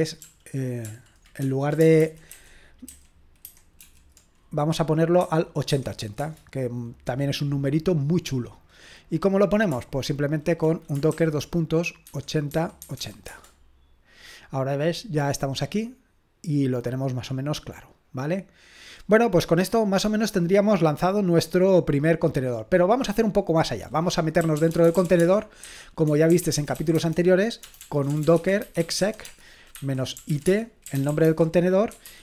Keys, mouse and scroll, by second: 0.2 ctrl+p, 0.9 ctrl+p, 1.4 ctrl+p, 5.2-6.2 typing, 8.6-11.1 drag, 11.1-13.5 typing, 15.6-19.0 drag, 19.1-22.0 scroll down 2, 22.0-22.6 scroll up 2, 22.6-24.4 drag, 24.2-32.2 typing.